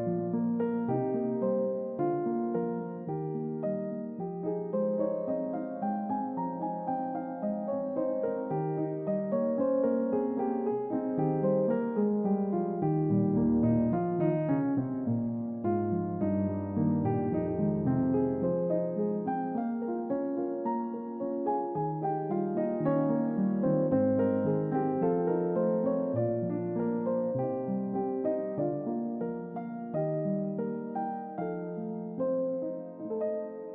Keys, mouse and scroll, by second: 0.5 click, 1.0 middle click, 1.8-2.1 middle drag, 2.4 ctrl+middle click, 2.8-5.0 middle drag, 5.2 click, 6.5-7.5 middle drag, 7.9-9.8 middle drag, 10.4 shift+middle click, 11.4 ctrl+middle click, 11.9-12.5 middle drag, 12.7-13.3 ctrl+middle drag, 13.6-14.0 middle drag, 14.2 shift+middle click, 14.7-16.4 middle drag, 16.5 ctrl+middle click, 17.3-19.9 middle drag, 20.4 middle drag, 20.8 ctrl+middle click, 21.5-22.2 middle drag, 22.5-23.5 shift+middle drag, 23.7-24.6 shift+middle drag, 24.9-27.3 middle drag, 27.5 shift+middle click, 28.3 ctrl+middle click, 28.8-32.3 middle drag, 33.1 ctrl+middle click.